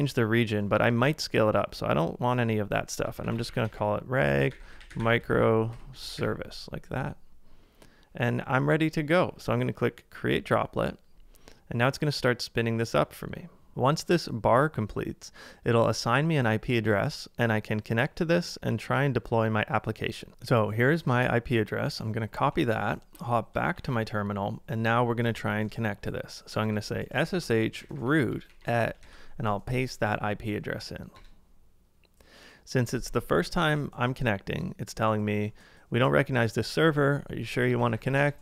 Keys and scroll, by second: 3.0-5.7 typing, 8.6 typing, 22.5 super+Tab, 23.7 ctrl+a, 23.8 typing, 26.6-29.0 typing, 29.0 super+v, 31.2 Return, 37.4-38.4 typing.